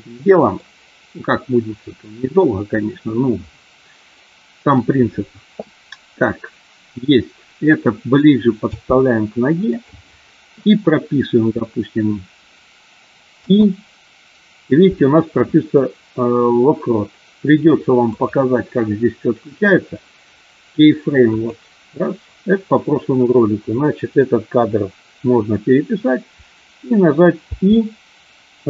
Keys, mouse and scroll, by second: 0.0 middle click, 8.8 g, 9.6 click, 13.2 i, 18.2 click.